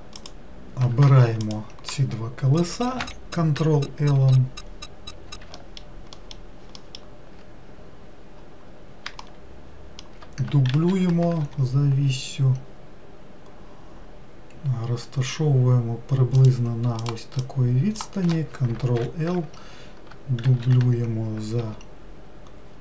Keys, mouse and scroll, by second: 0.4 click, 1.7 ctrl+click, 3.2 ctrl+l, 5.8 alt+middle click, 6.4 alt+middle click, 7.0 alt+middle click, 8.0-9.4 scroll down 3, 9.4-10.9 shift+middle drag, 10.9 shift+d, 17.2 click, 19.2 ctrl+l, 20.7 shift+d.